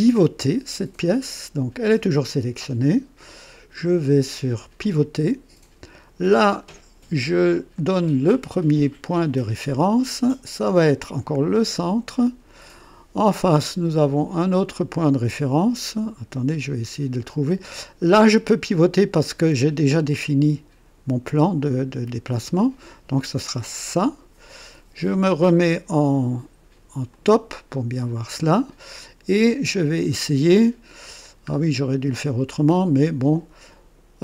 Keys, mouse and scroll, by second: 4.8 click, 6.3-6.8 scroll up 1, 7.2 scroll up 1, 7.7-9.2 right drag, 11.5 click, 12.1-12.8 scroll down 2, 13.4 right click, 18.5-20.0 drag, 23.8 click, 27.1 click, 31.4-31.8 scroll down 1, 32.1 right click.